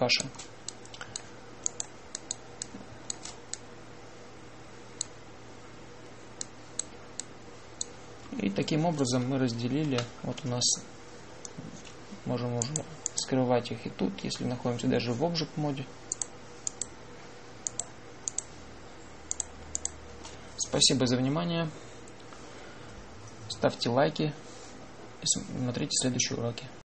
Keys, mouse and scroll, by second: 1.7-4.4 drag, 8.3-10.8 drag, 10.8 Tab, 13.5 click, 17.0 click.